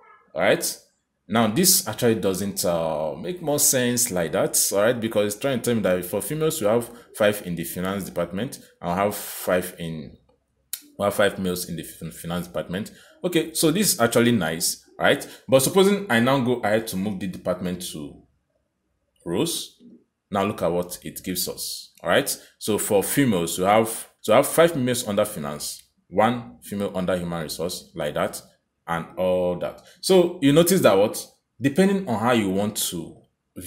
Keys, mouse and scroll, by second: 16.3 click, 30.9 click.